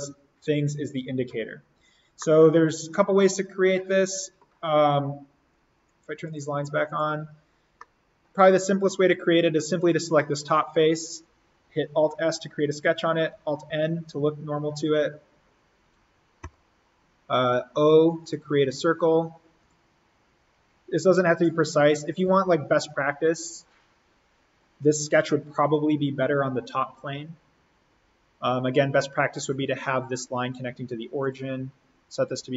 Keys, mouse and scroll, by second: 2.1-5.8 middle drag, 5.8 click, 7.7-9.8 middle drag, 9.8 click, 12.1 alt+s, 13.6 alt+n, 16.4 o, 18.1 click, 20.4 Escape, 22.2 l, 23.2 click, 25.4 Escape, 31.2-32.5 drag.